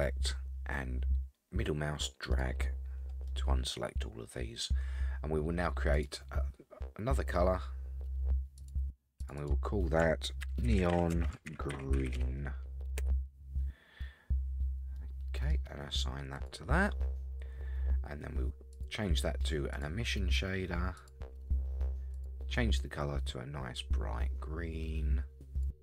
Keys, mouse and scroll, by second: 3.3-4.6 middle drag, 5.9 click, 8.6 click, 9.2 click, 9.4-13.9 drag, 12.1 e, 14.8 scroll down 1, 15.0 middle click, 16.3 click, 18.7-19.1 drag, 19.7-21.1 drag, 22.1 click.